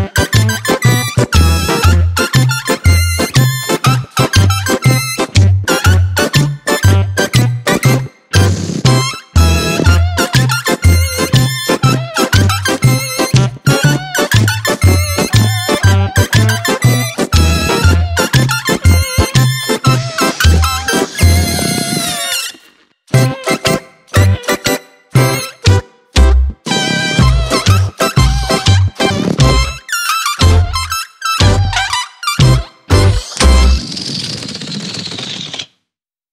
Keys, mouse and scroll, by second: 8.2 ctrl+click, 11.8 ctrl+j, 14.0 click, 14.4 Tab, 15.6 click, 16.8 click, 20.3 click, 22.5 Tab, 24.0 click, 25.5 g, 27.6 g, 28.7 click, 29.1 click, 31.9 g, 33.1 Tab, 34.7 Tab.